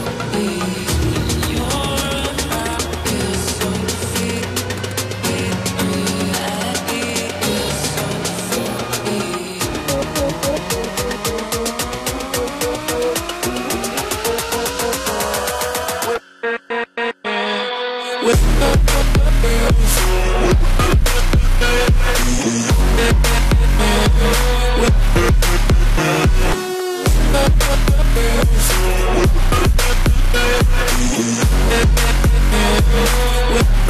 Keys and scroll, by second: 14.6 ctrl+t, 16.9 ctrl+-, 32.4 ctrl+=.